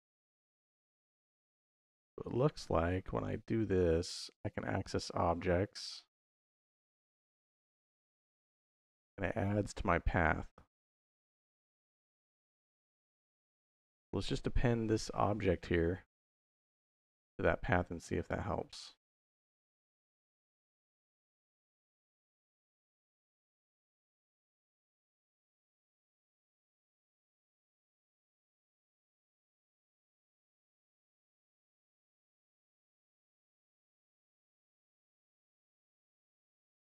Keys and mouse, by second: 2.1 click, 20.0 middle click, 20.6 click, 21.6 shift+a, 25.5 click, 27.0-27.9 drag, 28.3 click, 28.9 shift+a, 33.6-34.5 drag, 35.1 middle click, 35.8 middle click, 36.7-36.8 drag.